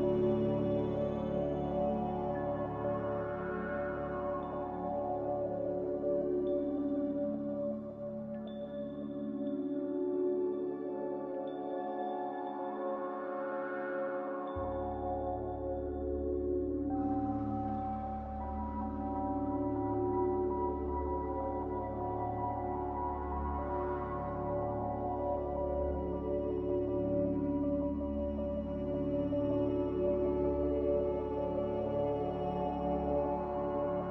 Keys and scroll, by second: 4.1 z, 10.4 x, 12.8-13.6 typing, 16.4-17.1 typing, 19.4 x, 20.0 z, 22.4-23.2 typing, 25.2 ctrl+z, 26.2 1.